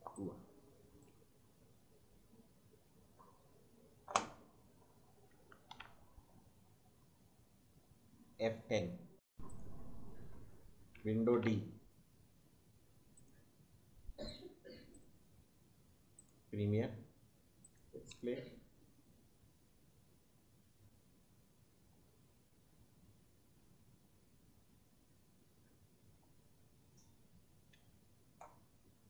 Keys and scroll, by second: 1.2 space, 4.7 space, 5.8 d, 11.4 d, 18.0 space, 22.2 space, 23.5 space, 27.7 space.